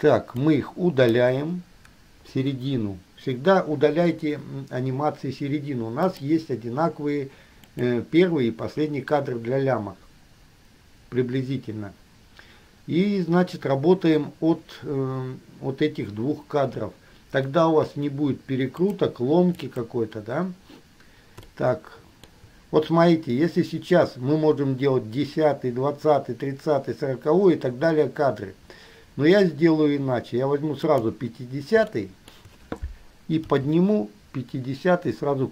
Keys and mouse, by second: 0.7-1.3 drag, 2.2 Delete, 6.3 click, 7.9 click, 19.0 click, 19.9 click, 21.7-22.5 shift+middle drag, 31.0 middle click, 32.2-32.7 shift+middle drag, 33.7 g.